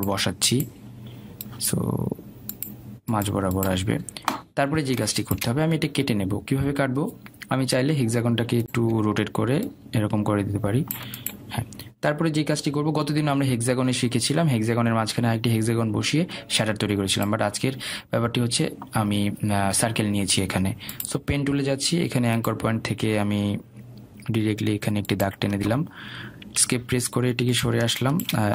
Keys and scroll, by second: 28.3 Escape.